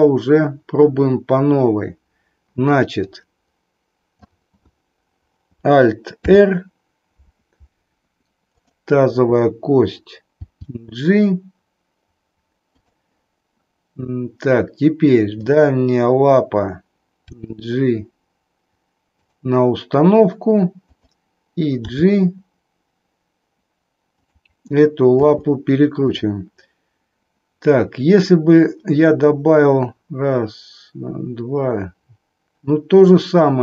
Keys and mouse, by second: 3.1-4.3 drag, 6.2 alt+r, 8.4-9.4 drag, 10.3 g, 15.3 click, 17.3 g, 22.0 g, 25.2 r.